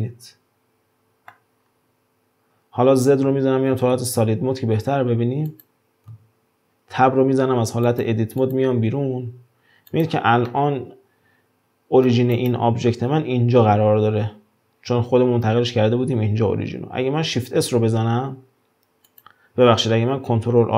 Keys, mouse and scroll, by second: 1.6 scroll down 2, 3.2 z, 4.0 z, 5.0-5.5 scroll up 1, 5.5 click, 7.2 Tab, 7.9 drag, 8.4 click, 9.9 drag, 10.5-12.3 middle drag, 12.3 click, 17.4 shift+s.